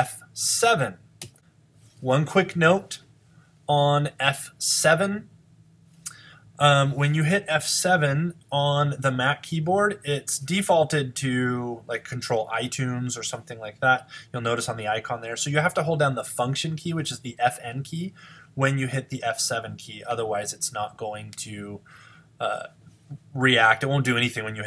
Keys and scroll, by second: 13.2 fn+F7.